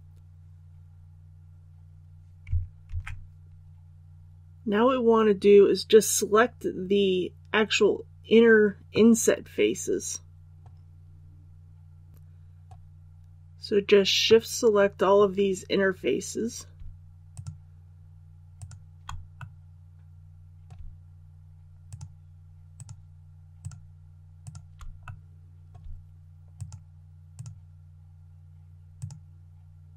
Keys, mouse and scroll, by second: 2.8 alt+a, 8.9 middle click, 9.7-15.5 middle drag, 15.8-16.7 scroll up 1, 17.3 shift+right click, 18.5 shift+right click, 19.3-20.7 middle drag, 21.8 shift+right click, 22.7 shift+right click, 23.6 shift+right click, 24.4 shift+right click, 25.0 middle click, 26.5 shift+right click, 27.3 shift+right click, 28.9 shift+right click.